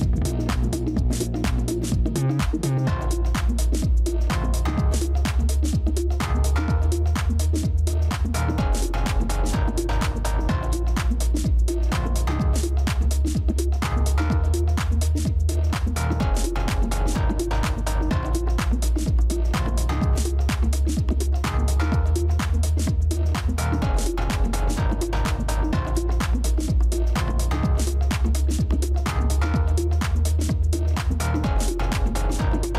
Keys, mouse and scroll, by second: 3.7 ctrl+d, 4.2 ctrl+d, 4.6 ctrl+d, 5.4 ctrl+d, 5.6 ctrl+d, 5.9 ctrl+d, 6.2 ctrl+d, 6.5 ctrl+d, 6.8 ctrl+d, 7.1 ctrl+d, 7.4 ctrl+d, 7.7 ctrl+d, 8.4 ctrl+d, 10.2 ctrl+d, 10.3 Delete, 11.3 v, 12.9 ctrl+z, 15.2 shift+click, 19.7 right click, 26.6 typing, 28.1-30.8 scroll down 1, 31.8 ctrl+g.